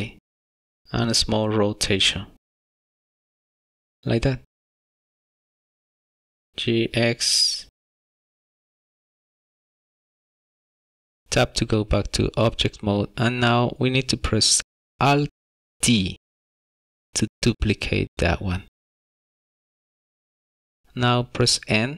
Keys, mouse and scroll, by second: 1.4 r, 6.9 g, 7.0 x, 9.2 g, 9.6 scroll down 1, 9.6 middle click, 9.9 shift+middle click, 10.1 middle click, 10.6 Tab, 10.9 s, 11.5 Tab, 12.2 middle click, 16.9 alt+d, 21.8 n.